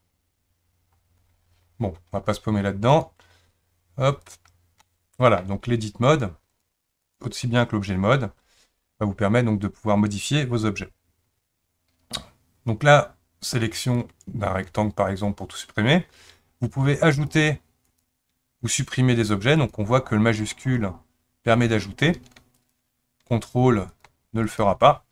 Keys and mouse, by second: 4.8 middle click, 6.6 click, 14.0-14.7 drag, 17.1 shift+click, 19.6 shift+click, 22.6 ctrl+click, 24.4 ctrl+click.